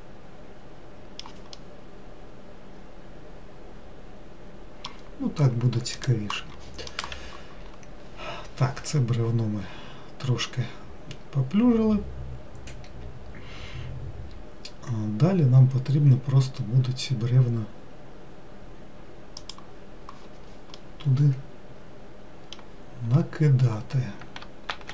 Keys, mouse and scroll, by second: 2.1-5.1 middle drag, 6.4-9.6 drag, 21.3-23.5 middle drag, 23.5-24.9 scroll down 2.